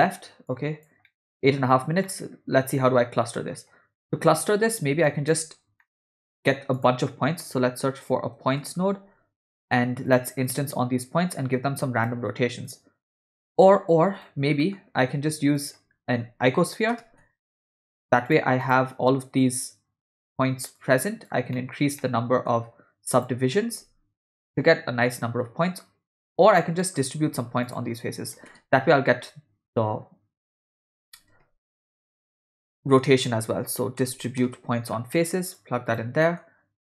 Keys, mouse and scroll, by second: 0.5 click, 1.0 middle click, 2.1 middle click, 4.1 middle click, 5.1-5.8 ctrl+right drag, 5.8 middle click, 6.1 shift+a, 11.3-12.1 drag, 12.6-13.1 drag, 14.2 drag, 14.3 x, 14.6 middle click, 15.0 shift+a, 19.4-20.3 drag, 20.8 click, 21.5 middle click, 22.0 ctrl+middle click, 23.1 click, 26.3 click, 26.8 middle click, 27.2 shift+a, 32.8 BackSpace, 32.9 BackSpace, 36.2 middle click.